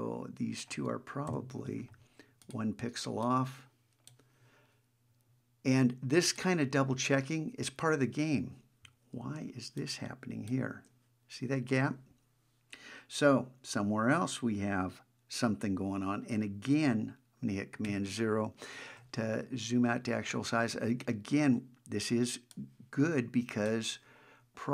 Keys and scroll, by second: 9.6 super+space, 17.8 super+0.